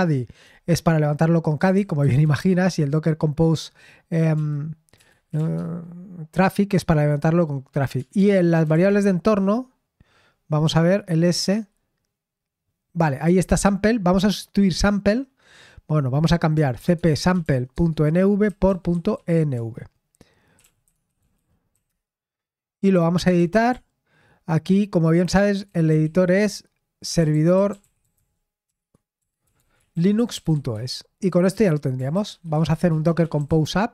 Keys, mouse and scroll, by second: 1.6-2.7 typing, 4.0-5.7 typing, 7.7-9.2 typing, 11.3 typing, 16.5-19.1 typing, 19.5 Return, 20.5-21.8 typing, 22.9-28.0 typing, 29.1-31.2 typing, 32.2-33.9 typing.